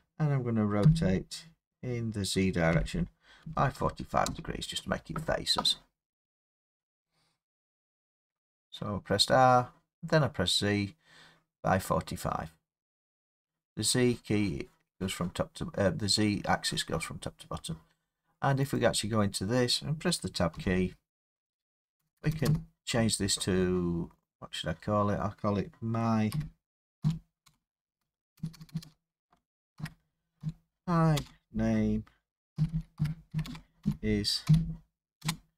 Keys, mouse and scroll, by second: 0.8-1.5 typing, 2.7-4.3 typing, 6.4 scroll, 8.4 scroll, 9.3 scroll down 4, 17.9 scroll down 3, 18.8 click, 20.5 Tab, 20.5-22.0 scroll, 22.0 BackSpace, 22.2 BackSpace, 22.3 BackSpace, 22.5 BackSpace, 26.3-27.0 typing, 28.4-30.4 typing, 32.3-34.5 typing.